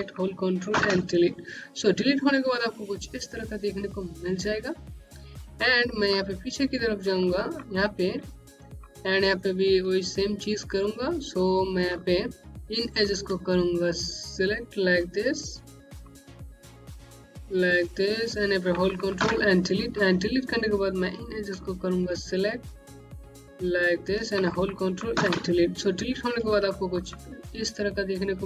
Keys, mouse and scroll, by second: 0.6 Delete, 4.8 scroll down 1, 5.6 alt+middle click, 6.5-6.9 scroll down 1, 7.0 middle click, 7.6-8.1 scroll up 2, 8.5 middle click, 11.7 alt+Num_Lock, 12.1 alt+middle click, 12.8 click, 14.3 shift+click, 16.0 click, 17.3 shift+click, 19.1 Delete, 20.8 click, 23.3 click, 25.0 Delete, 26.1 scroll down 1, 26.6 middle click.